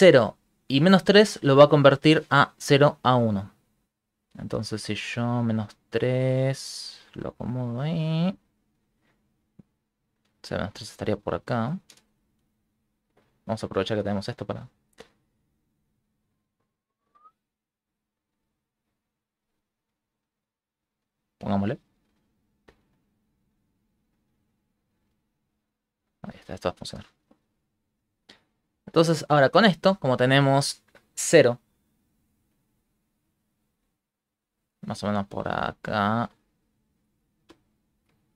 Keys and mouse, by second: 3.5 shift+click, 10.8 click, 18.2 click, 22.4 click, 25.9 click, 27.0 click, 29.1 middle click, 31.9 click, 33.0 click, 34.6 click, 36.1 click, 37.5 shift+z, 37.9 middle click, 38.2 middle click.